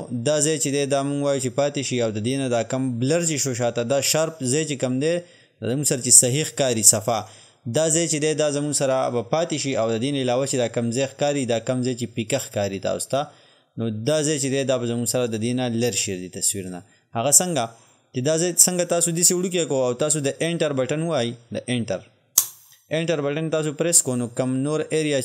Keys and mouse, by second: 22.4 Return.